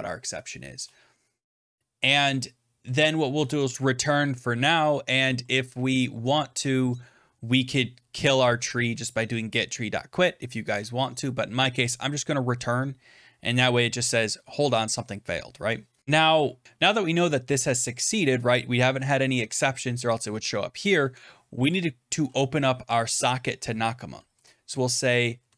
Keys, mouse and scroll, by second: 0.6 Return, 3.0-4.2 typing, 3.7 click, 7.5 Return, 10.6 BackSpace, 24.2 Return, 25.1-25.5 typing.